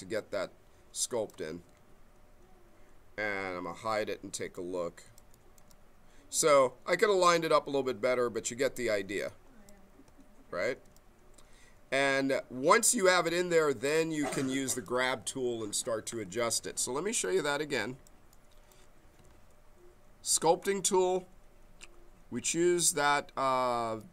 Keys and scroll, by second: 3.8 q, 16.4 ctrl+z, 19.2 q.